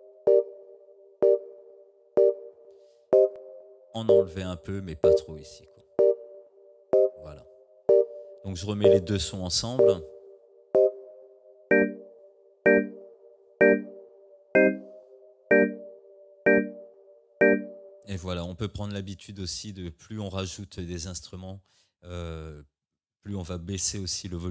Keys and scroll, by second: 18.0 space.